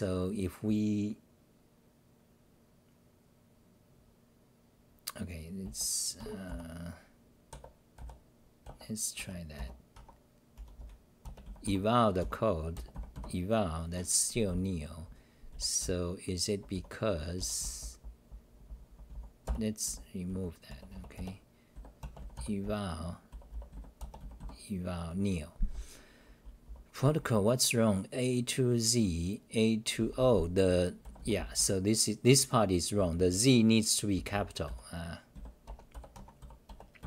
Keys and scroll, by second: 4.0 n, 6.5 u, 8.0 Tab, 9.2 Home, 9.5 Delete, 9.9 Home, 10.6 s, 10.8 s, 12.2 t, 14.5-24.2 typing, 20.9 Delete, 21.1 Delete, 25.7-28.3 typing, 30.0-31.7 typing, 32.7-35.3 typing, 36.1 Home, 36.4-37.0 typing, 36.7 Return.